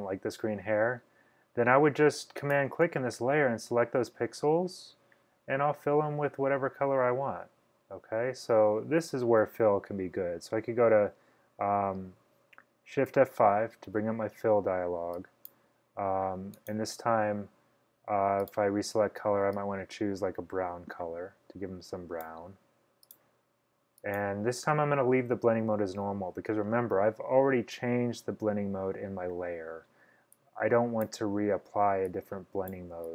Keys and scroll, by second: 13.2 shift+F5.